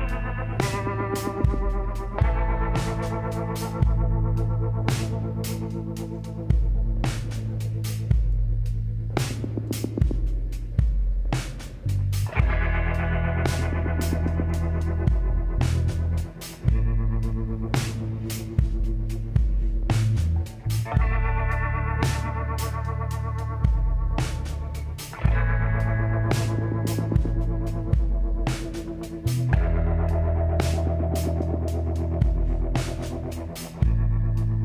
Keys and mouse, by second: 0.7 middle click, 1.8-3.6 drag, 2.2 z, 3.5 b, 6.9 b, 7.8-9.6 drag, 11.3-13.0 middle drag, 11.6 z, 12.5 a, 13.1 middle click, 16.9 KP_1, 17.7 middle click, 18.4 click, 19.1 click, 21.1 t, 25.9-27.5 middle drag, 29.8 click, 30.8-32.8 typing, 33.3-34.6 drag, 33.8 l, 34.0 l, 34.5 l.